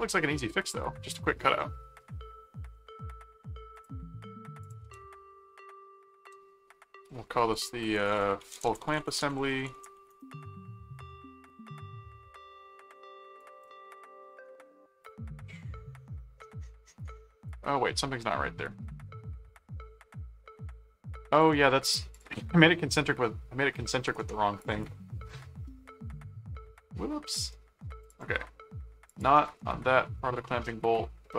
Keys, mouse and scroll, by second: 0.1-1.2 middle drag, 1.6 middle click, 2.7 middle click, 3.7 click, 4.6 ctrl+click, 4.8 ctrl+s, 7.8-10.4 typing, 11.1 middle click, 11.8-12.8 middle drag, 13.4 click, 13.9 middle click, 15.1-17.4 drag, 17.9-20.0 middle drag, 20.4 middle click, 21.4 click, 22.1 click, 24.0 right click, 24.6 click, 28.0 click, 29.1 click, 30.4-31.3 middle drag.